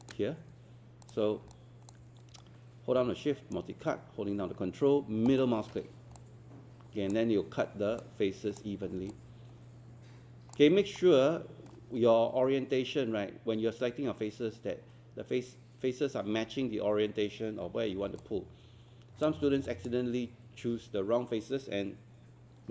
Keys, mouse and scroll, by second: 1.5 alt+click, 2.4 shift+right click, 5.3 ctrl+middle click, 6.2 alt+click, 8.0 alt+click, 8.9 scroll down 1, 9.1-10.6 alt+drag, 10.7 scroll up 1, 11.0 alt+middle click, 17.7 q, 18.0 scroll down 1, 18.2 alt+click, 19.4 scroll up 1, 19.7 alt+click.